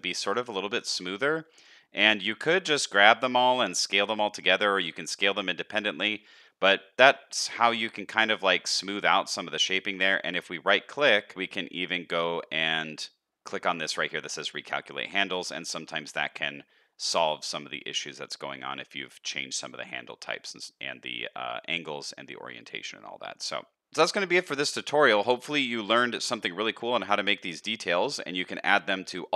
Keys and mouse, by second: 1.5 s, 6.5 shift+middle click, 7.6 shift+middle click, 15.1 middle click, 15.9 shift+middle click, 17.6 middle click, 18.2 shift+middle click, 19.8 middle click, 24.2 shift+middle drag, 24.7-25.0 middle drag, 25.2 shift+middle drag, 25.7-26.0 middle drag, 28.4-28.7 middle drag, 29.0 shift+middle drag.